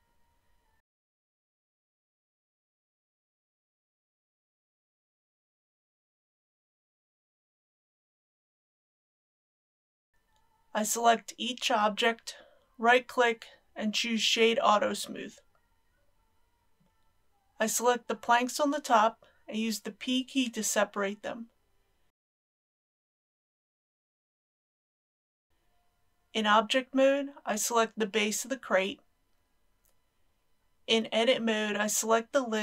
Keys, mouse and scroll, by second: 2.9 KP_5, 4.7 click, 5.3 KP_Decimal, 5.8 KP_0, 5.9 KP_1, 8.1 click, 10.9-12.0 right drag, 12.2 click, 14.2 right click, 15.5 click, 16.8 alt+a, 17.6-19.5 typing, 23.1 p, 24.9 click, 25.5 Return, 26.3 Tab, 29.9 click.